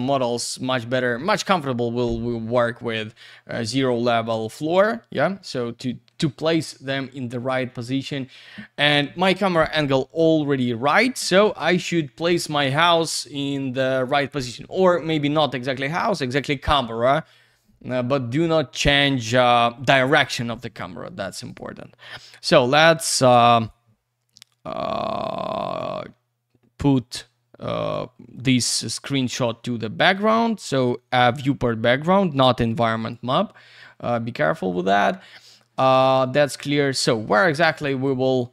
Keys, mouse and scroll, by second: 2.7-3.9 scroll down 1, 4.7 alt+w, 5.3 alt+w, 6.8 c, 21.5 click, 23.3 click, 23.6 click, 25.5 click, 25.6 click, 25.8 double click, 26.9 click, 28.3 click, 30.0 click, 33.0 click, 36.5 click, 37.2 Escape, 37.9 click, 38.2 click, 38.4 double click.